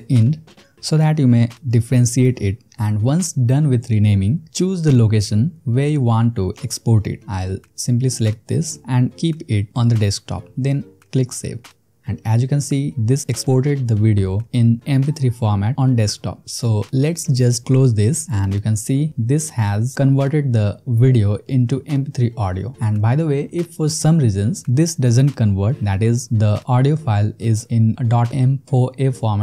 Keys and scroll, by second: 0.0-2.7 typing.